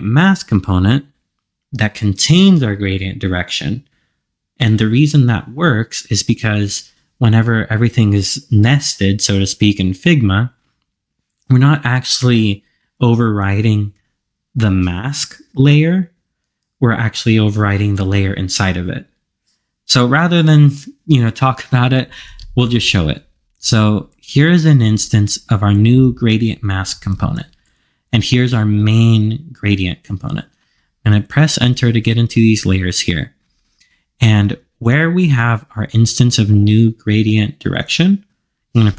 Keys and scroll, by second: 27.2 super+c.